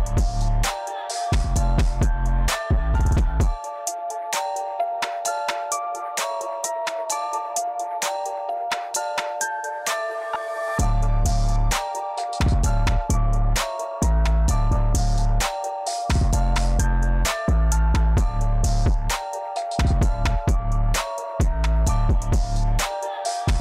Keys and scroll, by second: 0.1-1.3 typing, 0.9 Tab, 4.5 e, 10.6 f, 11.6 1, 11.9 Return, 13.0 a.